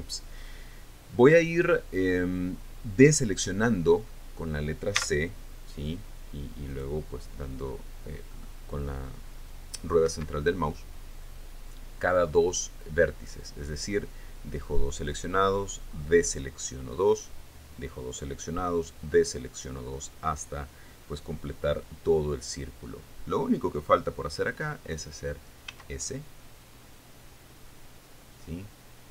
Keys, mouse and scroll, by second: 5.5 c, 7.3 click, 8.9 middle click, 10.7 Escape, 26.3 s.